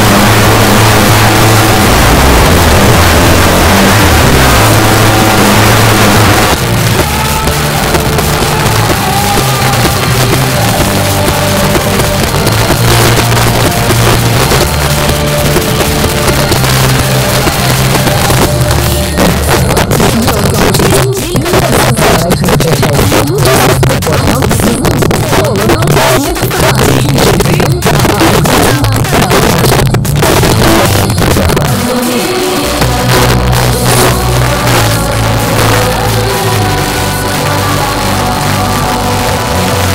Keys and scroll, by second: 6.4 Page_Down.